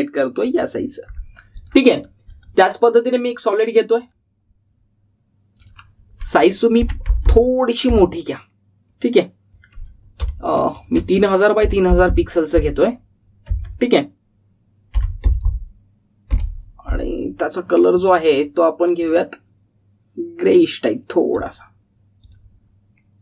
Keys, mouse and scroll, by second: 3.2 right click, 4.2 click, 14.4 Tab, 18.8-22.4 drag.